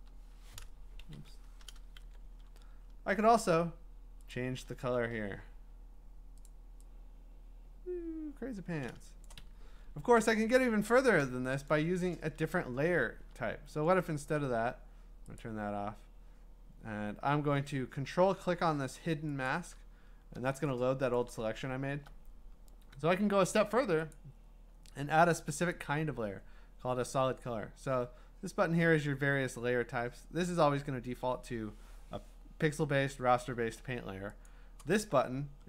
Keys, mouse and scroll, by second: 1.0 ctrl+z, 1.4 alt+BackSpace, 2.2 ctrl+d, 2.4-3.4 ctrl+scroll down 16, 4.3 scroll, 5.0 ctrl+u, 6.4 click, 6.5 click, 9.3 click, 9.4 Escape, 15.4 click, 19.5-21.1 ctrl+click, 21.0 ctrl+click, 21.1 click, 21.6-22.1 ctrl+scroll, 23.6 scroll, 24.1 click, 25.5 Escape, 34.5-35.6 drag.